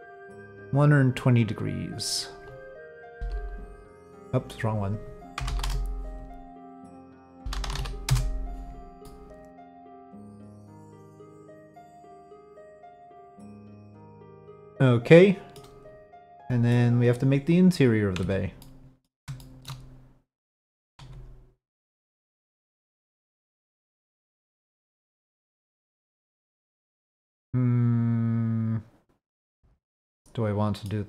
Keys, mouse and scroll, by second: 0.0-2.0 drag, 6.3 middle click, 8.7-15.5 middle drag, 16.4 drag, 18.2 Tab, 18.6 click, 19.4 shift+click, 21.0 1, 22.8 click, 24.0 click, 29.7 click, 29.9 middle click, 30.6 click.